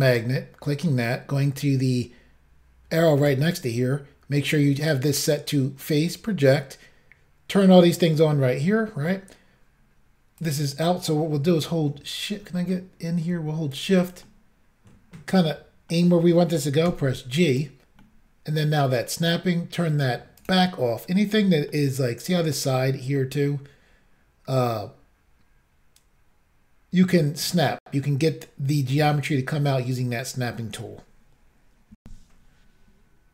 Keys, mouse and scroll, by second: 0.2 click, 0.2 click, 3.3 click, 3.3 click, 8.8 middle click, 10.5 click, 10.6 click, 12.6-13.8 scroll up 2, 13.8 shift+click, 13.9 shift+click, 14.3 middle click, 16.9 g, 17.6 click, 17.6 click, 18.1 middle click, 20.5 click, 20.5 click, 21.0-21.8 scroll down 3, 21.8 middle click, 23.0 middle click, 27.2-27.8 scroll up 1, 32.0 Insert.